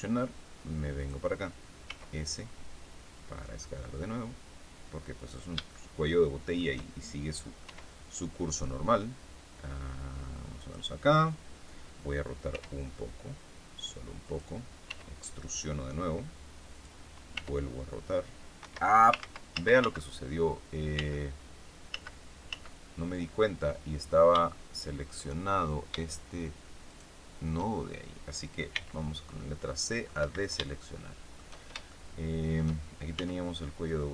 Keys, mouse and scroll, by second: 0.9 click, 1.8 s, 5.1 click, 5.6-6.7 shift+middle drag, 7.5 e, 10.5 click, 12.4 r, 14.1 click, 14.8 e, 16.7 click, 17.3 r, 18.5 Escape, 19.1 ctrl+z, 20.9 ctrl+z, 21.8 ctrl+z, 24.0 ctrl+scroll up 4, 24.3 shift+middle click, 26.8 shift+right click, 28.7 c, 29.3 middle click, 30.1 Escape, 30.6 shift+middle click, 31.2 shift+scroll up 2, 31.8 shift+middle click, 33.1 s.